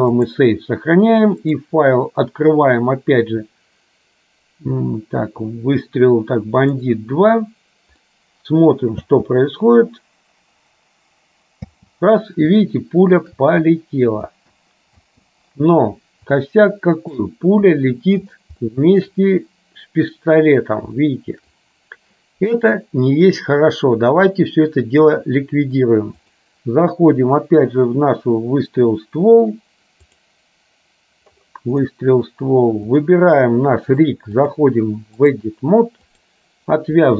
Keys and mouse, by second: 1.6-7.2 drag, 8.1 middle click, 9.2 space, 12.6 shift+space, 12.8 shift+middle click, 16.6 shift+middle click, 18.8 shift+middle click, 21.1 shift+middle click, 26.3-30.6 drag, 32.9 click, 34.6 click, 36.3 click.